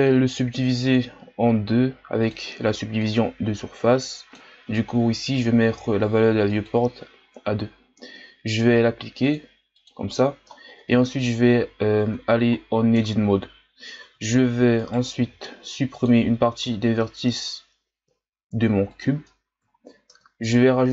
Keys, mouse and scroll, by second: 0.2-0.8 drag, 2.3-7.6 drag, 7.6-9.2 scroll up 2, 9.2-10.5 drag, 10.5-10.9 shift+scroll down 4, 10.9-12.2 scroll up 1, 12.2-12.5 shift+scroll up 2, 12.5-12.9 shift+scroll down 4, 12.9 Tab, 14.0 z, 14.7 right click, 15.1 b, 16.6 x, 19.8 ctrl+scroll up 1, 20.1 Tab.